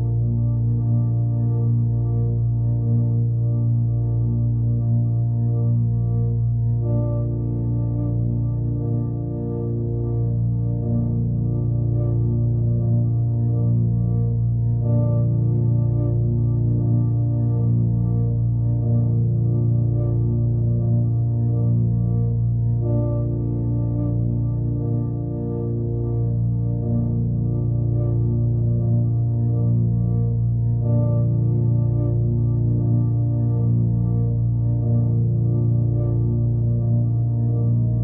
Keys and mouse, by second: 0.2-1.1 typing, 0.4 alt+shift+click, 1.3 click, 5.1 click, 5.4 click, 6.1 click, 6.2-6.6 typing, 7.8 click, 8.9 click, 10.3-11.3 drag, 13.8-15.6 drag, 16.4-17.6 drag, 21.8 click, 22.2 click, 23.3 typing, 24.6 click, 26.8 typing, 27.1 click, 30.5 click, 31.6-32.6 drag, 35.1-36.9 drag, 37.7-38.0 drag.